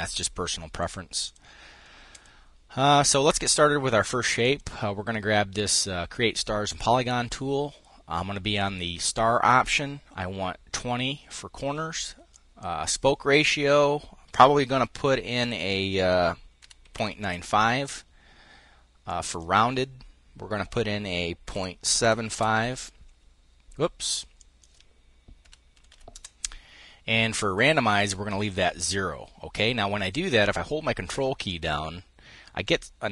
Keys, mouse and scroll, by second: 0.8 click, 1.8 click, 4.1 click, 12.0 click, 16.3 KP_Decimal, 16.5 KP_9, 16.6 KP_5, 16.9 KP_Enter, 18.7 click, 21.2 KP_Decimal, 21.7 KP_8, 22.0 KP_Enter, 24.1 click, 25.1 KP_Decimal, 25.4 KP_7, 25.5 KP_5, 25.8 KP_Enter, 31.1-33.1 ctrl+drag.